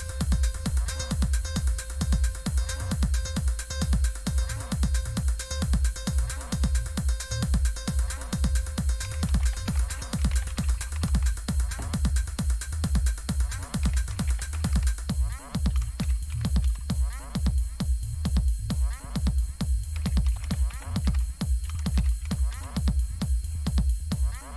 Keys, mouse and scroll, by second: 2.9 click, 7.5 click, 8.7-11.5 typing, 12.7 click, 13.5-17.1 typing, 18.8 click, 19.7-22.9 typing.